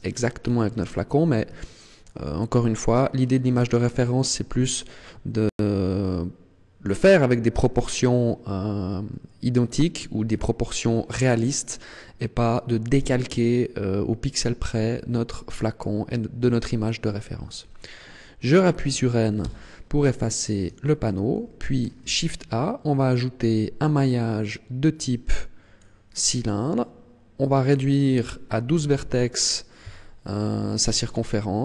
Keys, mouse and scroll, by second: 0.0 scroll down 1, 0.2-1.0 scroll down 8, 1.2 scroll up 1, 1.7 shift+middle click, 2.3-2.7 scroll up 2, 3.1 scroll down 1, 3.6 shift+middle click, 19.3 n, 19.9-20.7 scroll down 1, 20.7 shift+middle click, 22.1 shift+a, 27.5 click.